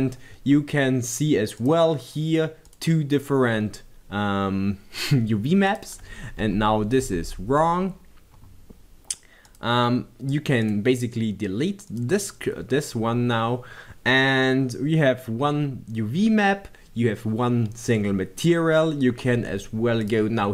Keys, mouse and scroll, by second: 0.5-2.8 middle drag, 2.8 click, 5.2 click, 6.6 b, 7.2 Tab, 9.6 click, 10.8 click, 12.2-20.5 drag.